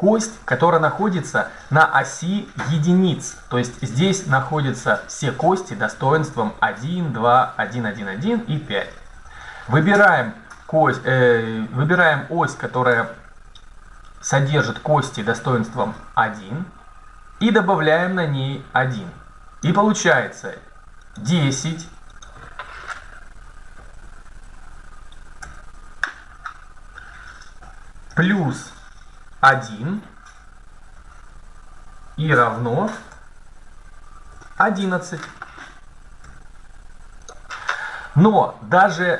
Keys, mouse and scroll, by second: 17.4-19.2 drag, 21.0 middle click, 22.7-23.8 right drag, 25.2 Tab, 27.9 shift+KP_Add, 29.3 KP_1, 31.1 shift+KP_Subtract, 32.4 BackSpace, 32.9 KP_Add, 34.1 KP_1, 34.5 KP_1, 36.1 Tab.